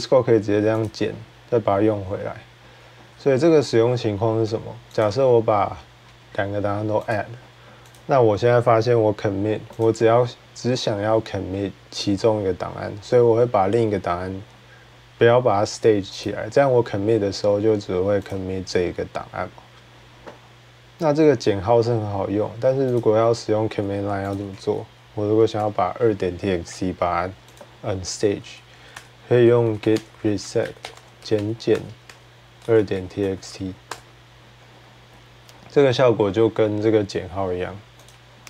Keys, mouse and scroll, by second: 0.6 click, 2.5-6.9 drag, 7.8 click, 9.6 click, 16.0 click, 18.1 click, 22.8 click, 24.1 click, 24.4 d, 25.3 BackSpace, 27.4 click, 28.7 click, 28.7-29.4 typing, 31.5 typing, 34.5-35.3 typing, 37.9-38.4 drag, 38.1-38.4 typing.